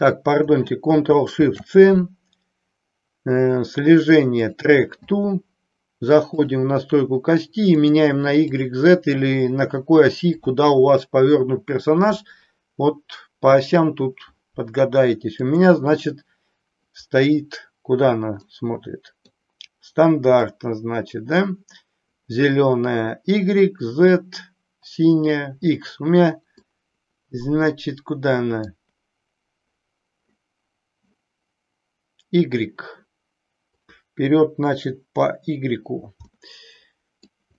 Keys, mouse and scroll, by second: 1.3 ctrl+shift+c, 6.3 click, 7.8 click, 8.5 click, 15.3-16.9 drag, 18.4 middle click, 20.4-21.4 middle drag, 26.7-28.7 middle drag, 36.3-37.3 middle drag.